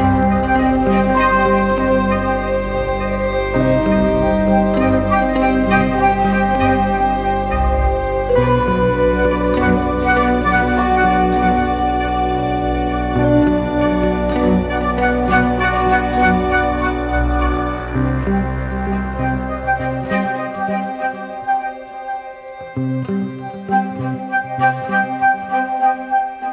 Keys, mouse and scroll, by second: 15.4 scroll down 1.